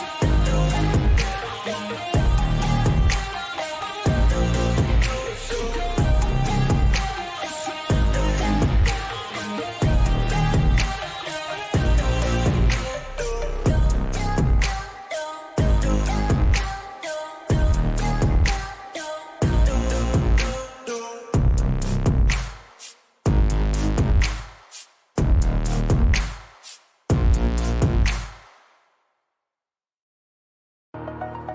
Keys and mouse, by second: 5.7 click, 10.6 click, 14.6 click, 19.3 click, 31.3 click.